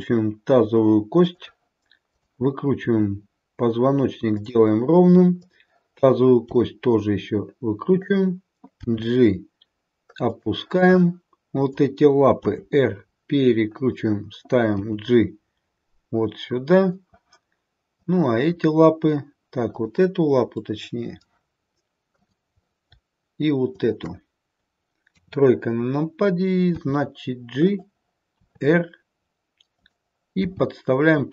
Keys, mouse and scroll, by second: 1.9 click, 2.7 r, 5.4 click, 6.5 r, 8.8 g, 11.2 click, 12.3 r, 14.6 g, 19.5 click, 19.6 click, 20.5 middle click, 20.7 middle click, 22.0 click, 23.6 shift+click, 25.0 KP_3, 26.8 g, 28.4 r, 30.4 g.